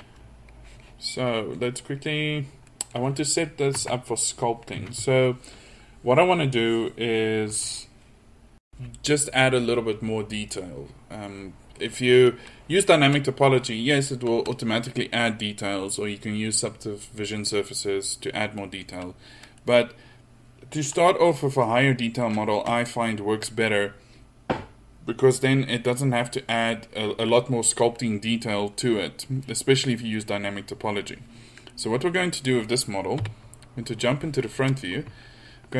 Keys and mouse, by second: 2.3-2.7 middle drag, 3.8 Tab, 4.8 a, 19.7 middle click, 21.7-30.9 middle drag, 31.7 middle click, 33.2 KP_1.